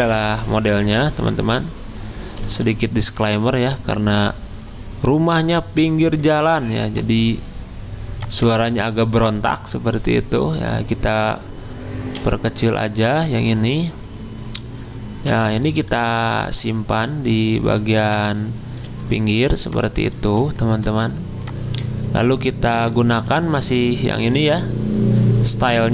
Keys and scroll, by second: 2.4 alt+Tab, 12.2 2, 13.1 Return.